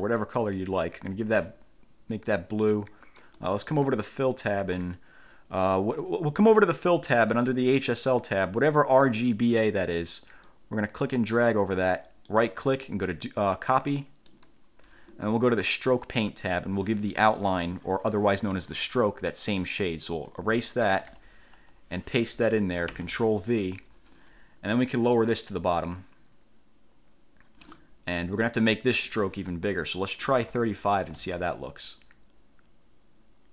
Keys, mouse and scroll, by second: 0.3 click, 2.3 click, 3.4 click, 7.5 click, 10.7 click, 12.5 click, 14.5 click, 16.5 click, 19.9 click, 21.2 BackSpace, 23.1 ctrl+v, 25.3 click, 28.4 click, 30.4 3, 30.7 5.